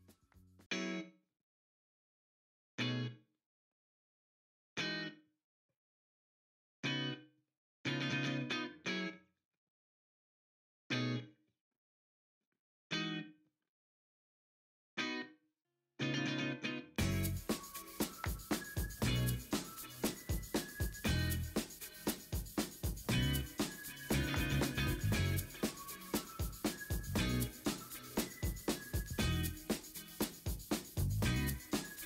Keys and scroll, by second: 0.0 Escape, 0.4 ctrl+t, 1.3 v, 2.4 v, 2.8 v, 3.0 ctrl+g, 3.0 v, 4.1-4.5 typing, 4.5 Return, 5.7 l, 6.5 |, 12.7 v, 17.9 alt+BackSpace, 17.9 ctrl+d, 18.8 ctrl+j, 18.9 v, 19.2 ctrl+t, 19.7 ctrl+t, 21.5 ctrl+a, 22.4 ctrl+a, 22.9 ctrl+t, 25.2 ctrl+d, 25.5 typing, 26.1 ctrl+d, 28.9 w, 29.7 Return, 30.3 ctrl+shift+i, 30.5 ctrl+x, 30.7 ctrl+w, 31.5 ctrl+v.